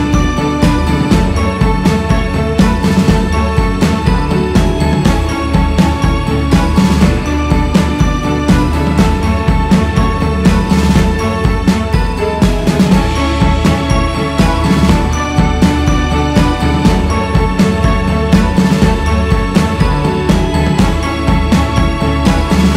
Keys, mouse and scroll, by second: 2.5-9.8 drag, 9.8 scroll down 1, 10.9-13.3 drag, 13.3-13.9 scroll up 1, 13.9-14.7 scroll up 1, 14.7-21.5 drag, 22.5-22.7 drag.